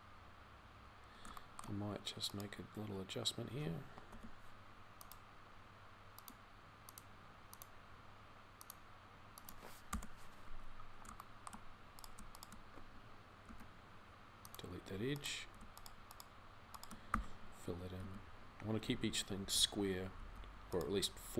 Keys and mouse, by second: 13.3 x, 16.9 f, 17.8 z, 20.0 z.